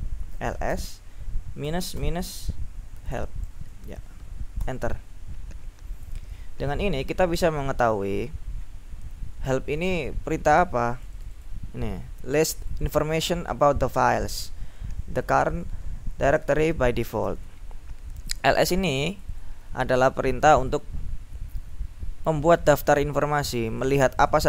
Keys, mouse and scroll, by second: 0.2-1.8 typing, 2.9-4.2 typing, 4.7 Return, 6.5-8.8 scroll up 3, 8.8-9.5 scroll down 1, 11.0-12.1 drag, 12.6 click, 18.2 click, 19.3 click, 20.5 click, 22.7 click, 23.8-24.4 drag.